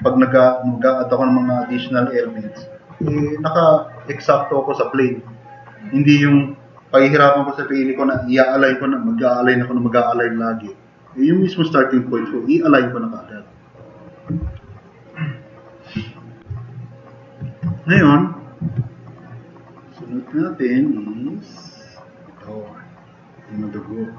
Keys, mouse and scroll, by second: 14.8-15.4 drag, 16.0 click, 16.4-17.1 drag.